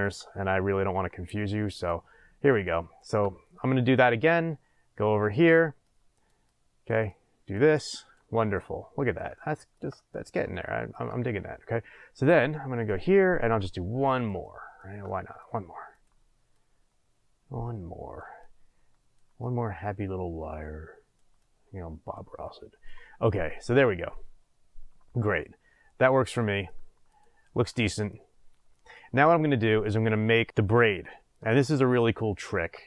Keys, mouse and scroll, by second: 0.4-1.7 scroll up 2, 1.7 click, 2.5 click, 3.6-5.2 middle drag, 5.2 click, 5.8 click, 6.4 click, 7.1 click, 7.7 click, 8.5-11.0 middle drag, 12.1 click, 12.8 click, 13.7-15.9 middle drag, 15.9 click, 16.5 click, 18.3 click, 19.4 click, 21.3 click, 22.4-23.4 middle drag, 23.4 click, 24.1-27.1 middle drag, 27.1 click, 27.7-32.8 middle drag, 28.3-28.8 scroll down 2.